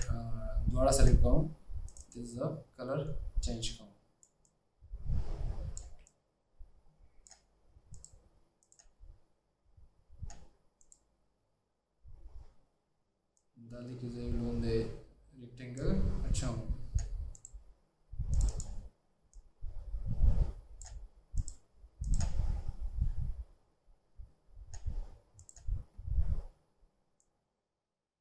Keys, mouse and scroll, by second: 0.0 shift+click, 3.5 double click, 18.6 double click.